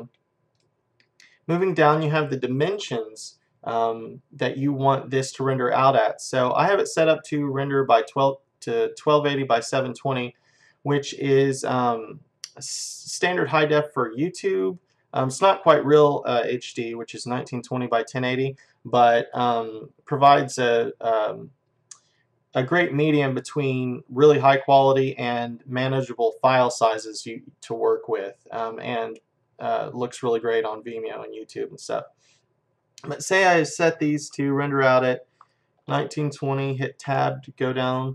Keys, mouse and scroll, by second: 33.0-35.0 drag.